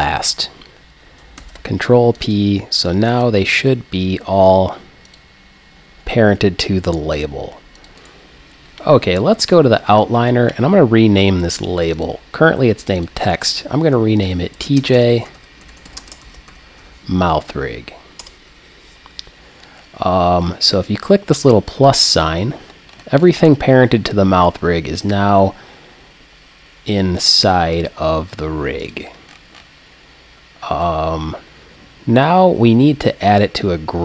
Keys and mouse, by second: 1.4 ctrl+p, 5.1-7.0 drag, 7.8 click, 8.0-9.7 right drag, 12.0-14.9 drag, 21.9-33.8 drag.